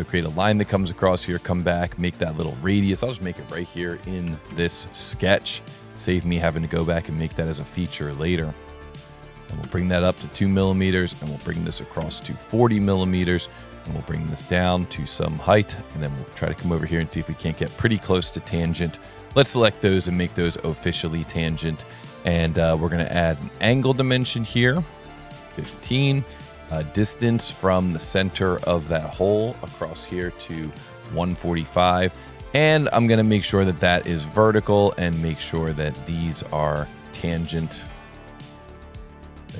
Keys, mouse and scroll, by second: 2.1 click, 8.7 click, 11.0 click, 14.8 click, 16.8 click, 17.8 click, 20.0 t, 20.6 a, 21.0 s, 22.3 click, 23.3 click, 24.1 click, 24.5 click, 26.9 click, 28.2 click, 28.8 click, 32.0 scroll down 4, 32.2 scroll up 1, 32.4 scroll down 1, 35.1 click, 36.2 click, 37.0 click, 38.1 click, 38.7 t.